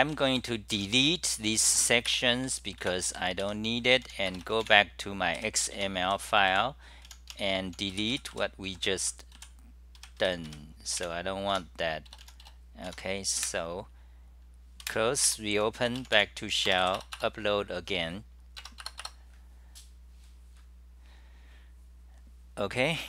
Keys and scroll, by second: 2.7-3.6 typing, 5.5-11.0 typing, 11.7 Home, 12.9 Home, 13.5 super+w, 14.9 super+w, 15.4 shift+super+t, 17.1 Return, 17.2 Return, 20.5 Return.